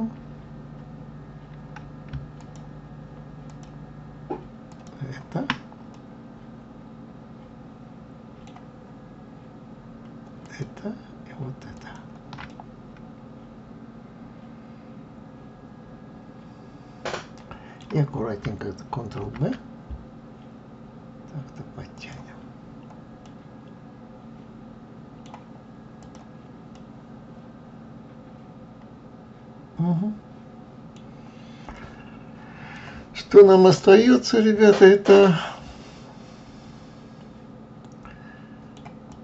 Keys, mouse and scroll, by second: 2.4 alt+shift+click, 3.5 alt+shift+click, 4.7 alt+shift+click, 5.9-8.9 middle drag, 10.4 alt+shift+click, 11.7 alt+shift+click, 12.5-15.5 middle drag, 19.2 ctrl+b, 23.2-26.0 middle drag, 26.0 click, 26.7-29.7 middle drag, 29.8 middle click, 31.0-31.7 scroll down 3, 31.7-33.0 middle drag, 33.0 scroll down 1, 33.7-36.8 middle drag, 39.1 click.